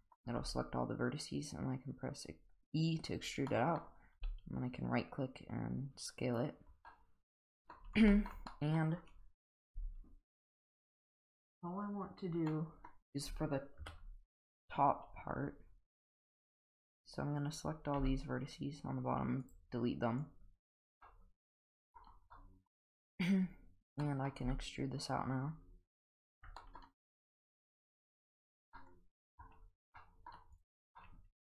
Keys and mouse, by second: 0.4 e, 3.5-3.8 middle drag, 4.2 s, 6.9-7.7 middle drag, 8.1 shift+middle drag, 8.5 middle click, 12.5 middle click, 13.8 KP_1, 16.0 click, 16.9-17.5 drag, 18.0 x, 20.2-20.7 drag, 21.0-21.9 middle drag, 22.4 middle drag, 24.0 middle drag, 24.4 e, 26.3 Tab, 26.6 middle click, 28.0 click, 28.3 drag, 28.8-29.4 middle drag, 30.0-30.3 middle drag, 31.0-31.4 middle drag.